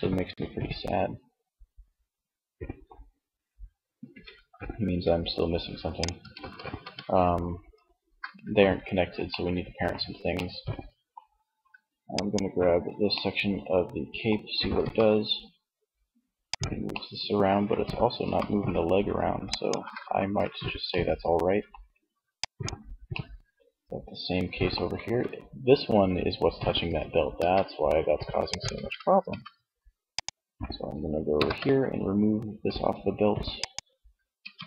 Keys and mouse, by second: 3.2 g, 5.6 ctrl+z, 11.3-12.8 drag, 13.8 r, 15.7-17.2 drag, 17.2 r, 18.7 click, 19.3 ctrl+z, 19.9 middle click, 22.2 middle click, 23.0 middle click, 26.5 r, 27.6 ctrl+z, 28.6 Tab, 30.5 ctrl+l, 32.7-34.6 drag, 33.6 Tab.